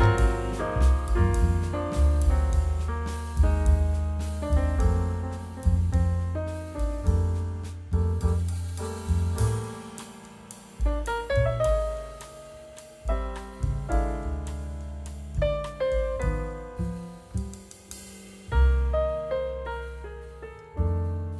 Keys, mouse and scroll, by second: 19.8-20.8 scroll down 2, 21.1 scroll up 1.